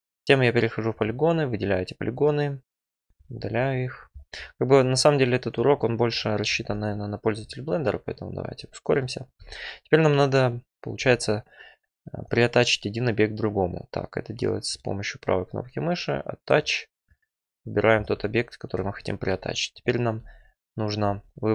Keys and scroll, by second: 3.0 Delete, 8.3 `, 19.1 2.